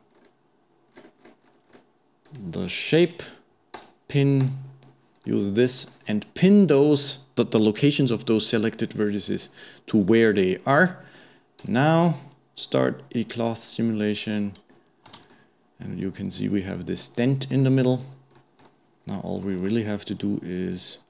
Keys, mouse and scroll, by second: 0.9-2.2 scroll down 15, 2.2-2.7 drag, 2.7-3.8 middle drag, 3.8-5.2 drag, 5.2-8.3 middle drag, 10.8-12.2 drag, 15.2 space, 15.3-17.9 middle drag, 17.9-18.4 scroll up 1, 18.4-19.0 middle drag, 19.0-19.6 scroll down 1, 19.6 shift+a.